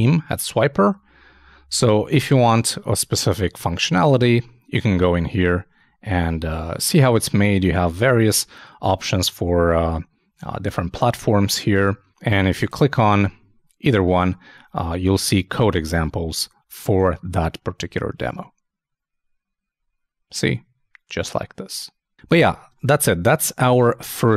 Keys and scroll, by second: 23.8 super+i.